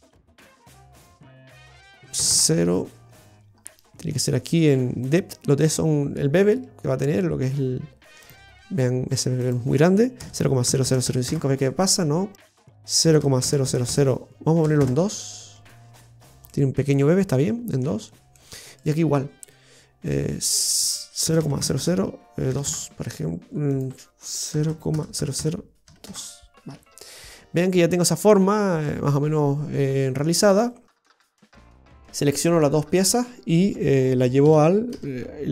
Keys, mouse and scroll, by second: 3.0 scroll down 1, 8.2 click, 9.4 click, 10.8 KP_0, 12.3 click, 13.6 KP_0, 15.9-16.3 scroll up 4, 16.4 middle click, 18.0-18.3 scroll down 1, 18.3 middle click, 18.8 right click, 20.5 click, 21.7 KP_0, 23.6 click, 25.1 KP_0, 26.9-27.5 scroll down 5, 27.5 middle click, 31.2 a, 31.7 middle click, 34.4 g.